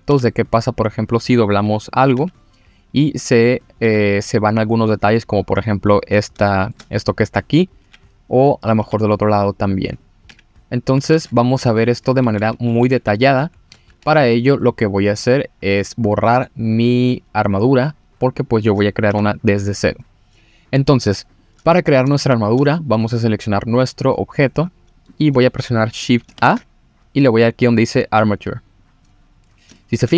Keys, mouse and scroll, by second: 0.1 g, 1.0 click, 1.9 click, 2.1 g, 3.0 click, 3.6 click, 3.8 g, 4.9 click, 6.0-6.5 scroll up 3, 6.5 shift+middle drag, 7.7 click, 7.8 g, 8.3 click, 8.7 click, 9.5 click, 9.9 click, 10.3 g, 10.8 click, 11.1 ctrl+z, 11.4-12.1 scroll down 2, 12.1 scroll down 1, 12.2 ctrl+z, 12.5 ctrl+z, 12.8 ctrl+z, 13.1 ctrl+z, 13.4 ctrl+z, 13.9 Tab, 14.6 middle click, 15.5-16.1 scroll up 3, 16.1 middle click, 18.3 click, 19.1 Delete, 21.3 click, 22.1-22.5 shift+middle drag, 22.7 click, 23.0-24.4 scroll up 1, 24.4-24.8 scroll down 1, 24.8-25.1 scroll up 1, 25.8 click, 26.0 click, 26.4 shift+a, 29.3-29.7 scroll down 2, 29.7 shift+middle drag.